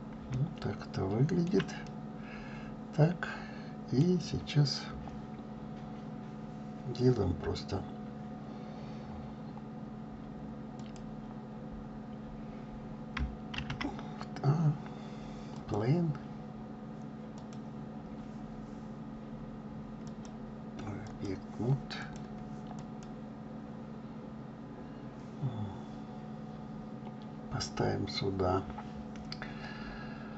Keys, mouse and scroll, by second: 0.0-0.3 scroll down 3, 0.6-4.4 shift+middle drag, 4.4 scroll down 3, 15.8 shift+a, 17.4 click, 21.2-22.9 drag.